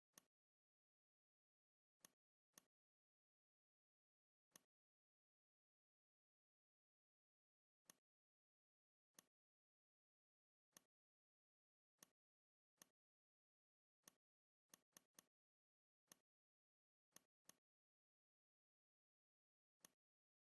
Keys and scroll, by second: 1.5 v, 6.1 shift+m, 11.5 v, 15.7 space.